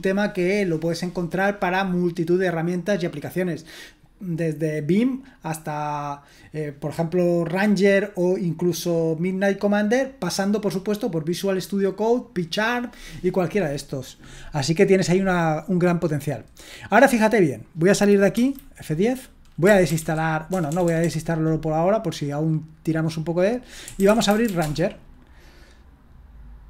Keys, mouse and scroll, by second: 18.3 F10, 19.4-20.8 typing, 23.7-24.9 typing.